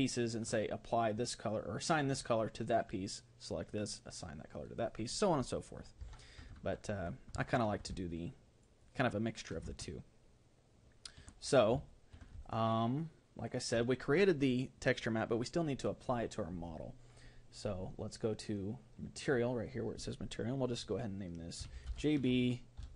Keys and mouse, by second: 0.2-2.4 right drag, 6.0 Tab, 7.5-11.5 middle drag, 11.9-14.0 middle drag.